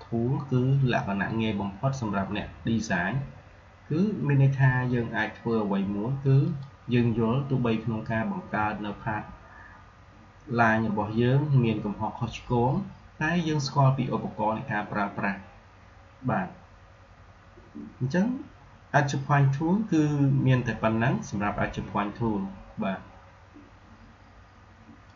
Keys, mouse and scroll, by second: 6.4 click, 25.0 click.